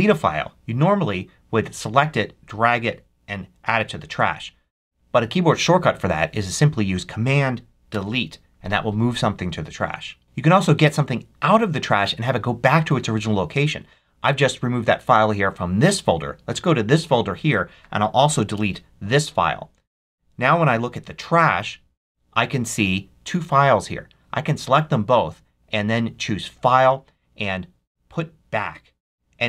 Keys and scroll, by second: 7.8 super+BackSpace, 18.4 super+BackSpace.